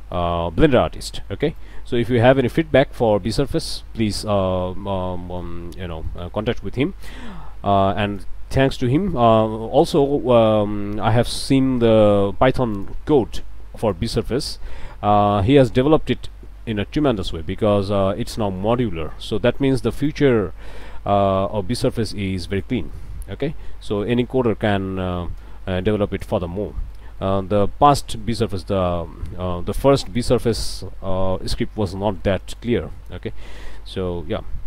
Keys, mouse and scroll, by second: 0.3 ctrl+z, 0.7 ctrl+click, 1.6-2.6 drag, 2.6 scroll down 2, 3.0 click, 3.6-5.6 drag, 5.7 scroll up 1, 6.0 middle click, 6.8-8.4 drag, 9.0-10.0 drag, 10.2 click, 10.7 scroll up 1, 11.8 ctrl+r, 12.7 click, 13.8 click, 14.1 scroll down 1, 14.5 click, 15.0 Tab, 15.5 click, 16.3-17.4 drag, 17.7 scroll up 1, 18.1 Tab, 18.4 click, 19.1 click, 20.1 click, 22.1 click, 22.9 click, 23.8 click, 24.7 click, 26.2 click, 26.6 scroll down 1, 26.9 click, 27.5 scroll down 1, 28.1 Tab, 28.4 click, 30.0-31.6 drag, 31.8 Tab, 31.9 scroll up 2, 32.3 click, 32.8 scroll up 2, 33.0 click, 33.4 a.